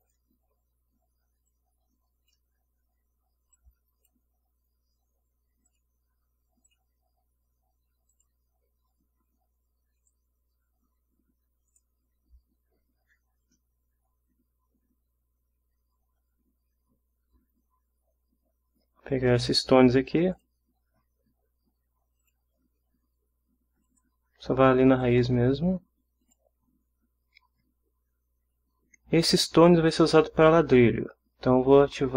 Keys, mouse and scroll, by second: 0.0 click, 1.5-2.5 drag, 3.5 click, 5.7 click, 6.7 click, 8.1 click, 10.0 click, 11.7 click, 20.3 click, 22.2 click, 23.9 click, 25.0 click, 26.2 click.